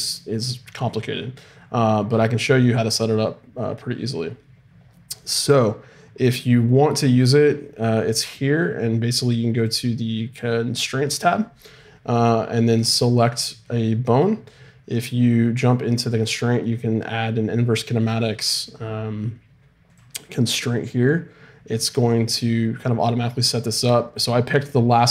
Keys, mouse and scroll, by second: 2.2-3.5 scroll up 1, 3.5-8.3 scroll up 1, 9.6-11.6 drag, 12.7-19.9 right drag.